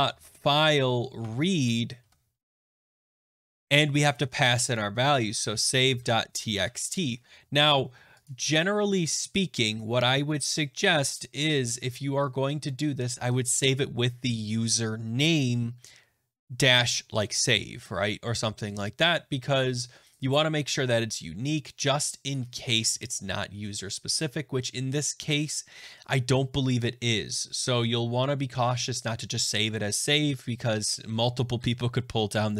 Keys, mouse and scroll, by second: 0.0-0.6 typing, 1.1 Tab, 1.7-3.6 typing, 4.9-7.0 typing, 8.2 click.